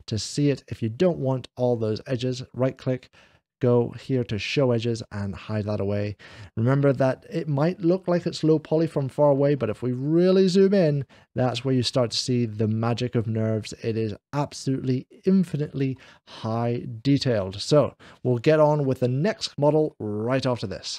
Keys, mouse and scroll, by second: 0.3 click, 0.3 scroll up 1, 1.5-2.5 right drag, 1.8-2.4 scroll down 1, 4.2 click, 4.9-8.9 middle drag, 4.9 right click, 9.5-10.7 ctrl+middle drag, 13.4 middle click, 14.3-15.6 middle drag, 16.3 scroll down 1, 19.8-20.8 middle drag.